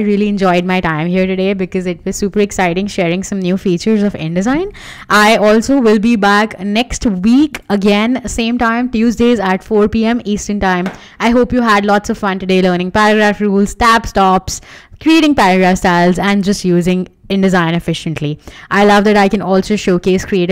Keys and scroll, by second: 5.7 Escape.